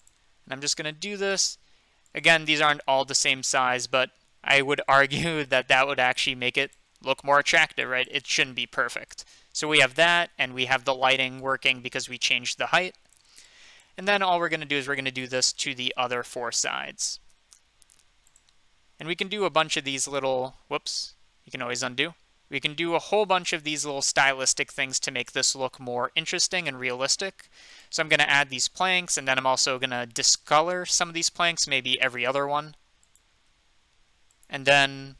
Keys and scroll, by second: 20.7 ctrl+z, 23.1 ctrl+z.